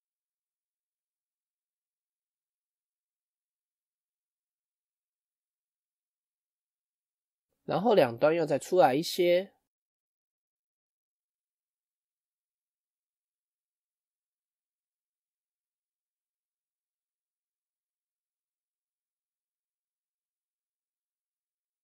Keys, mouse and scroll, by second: 0.5-2.1 middle drag, 2.1 Tab, 2.6-8.2 middle drag, 9.4 Tab, 9.9 KP_1, 11.6 alt+click, 12.3 alt+shift+click, 13.8 alt+shift+click, 14.5 alt+shift+click, 20.8 scroll down 2, 21.1-21.8 shift+middle drag.